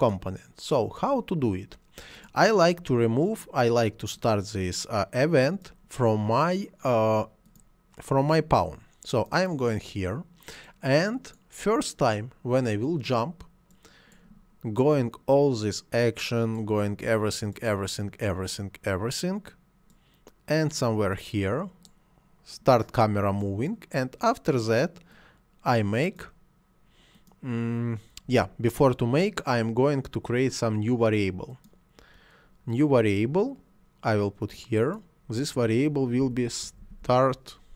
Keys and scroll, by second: 36.2 s, 36.6 t, 36.8 a, 37.0 r.